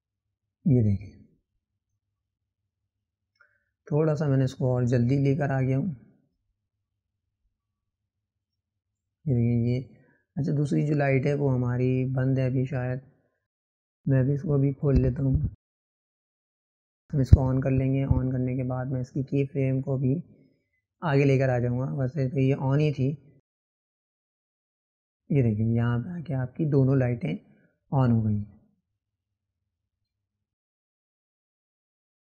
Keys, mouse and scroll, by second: 0.4 click, 3.4-8.0 drag, 15.1 click, 16.4-18.4 drag, 23.3 click, 23.9-25.6 drag, 30.4 click.